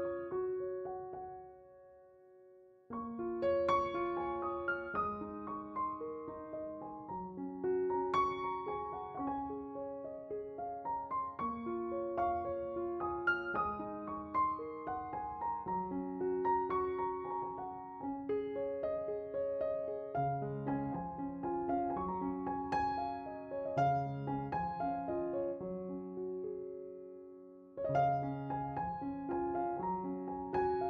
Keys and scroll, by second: 15.9 s, 22.4 s, 29.4 s.